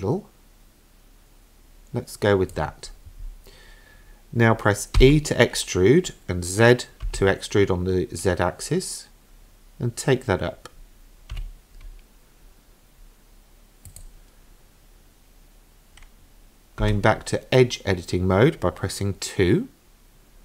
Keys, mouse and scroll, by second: 5.0 e, 16.8 2.